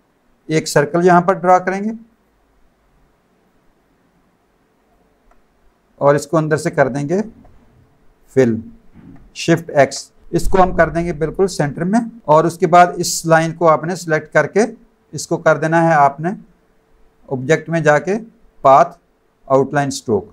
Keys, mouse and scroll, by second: 2.1 click, 3.4 shift+click, 9.7 shift+x, 11.9 click, 12.3 click, 13.9 click, 17.3 click, 18.6 click, 19.8 click.